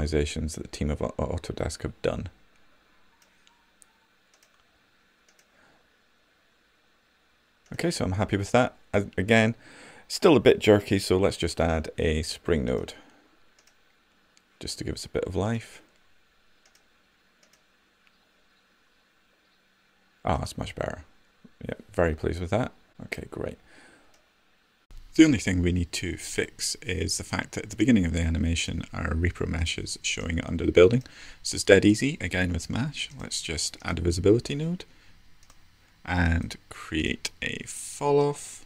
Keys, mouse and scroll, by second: 36.0-38.6 right drag.